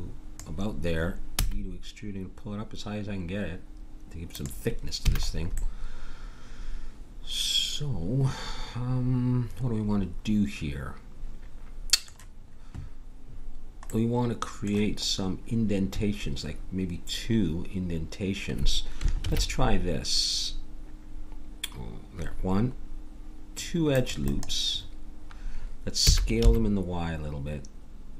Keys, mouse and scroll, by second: 1.3 e, 5.0 a, 13.9 middle click, 19.2 ctrl+r, 26.0 s.